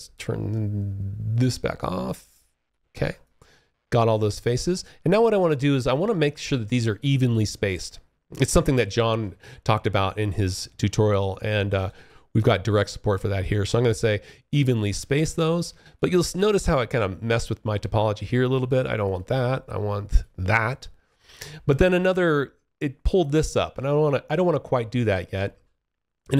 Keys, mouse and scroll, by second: 0.5 click, 0.9 double click, 2.3 alt+click, 5.1 alt+click, 10.9 alt+v, 11.5-13.8 alt+f, 14.7 alt+click, 18.1 click, 19.2 click, 20.3 alt+click, 21.0-21.7 alt+scroll up 1, 22.5 alt+click, 23.8 alt+click.